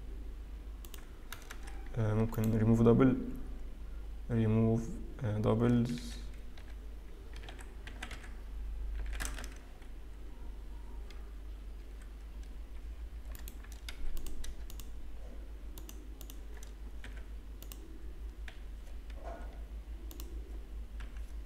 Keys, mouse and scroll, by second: 2.0 a, 2.1 a, 2.6 right click, 6.7 F3, 13.3 right click, 14.5 click, 15.2 shift+click, 16.9 shift+click, 17.1 f, 17.7 click, 18.7 f, 20.6 click, 21.2 g.